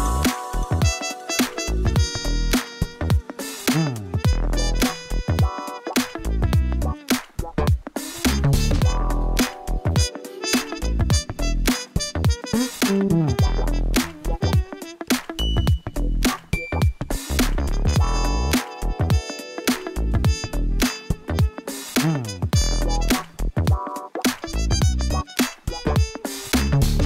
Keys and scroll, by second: 0.0-0.6 typing, 1.7 r, 1.9 o, 2.3 m, 6.4 Tab, 7.4 Tab, 9.9 shift+s, 11.6 Tab, 12.1 shift+a, 14.5 g, 14.8 z, 16.8 Tab, 19.0 s, 19.2 shift+z, 22.0 Tab, 22.3 g, 22.7 shift+z.